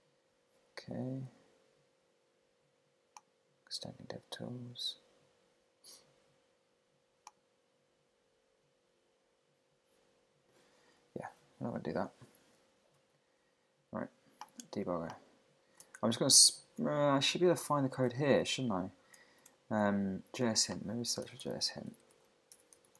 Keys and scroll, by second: 11.4 super+w, 13.0 super+`, 16.1 super+Tab, 16.7 shift+super+Tab, 18.1 super+`, 19.4 shift+super+`.